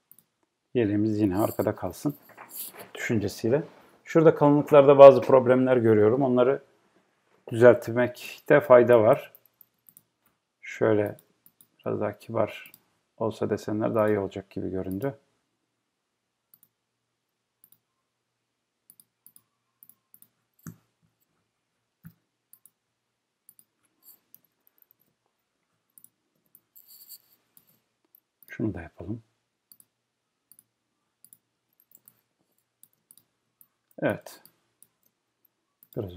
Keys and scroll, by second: 25.0 Return.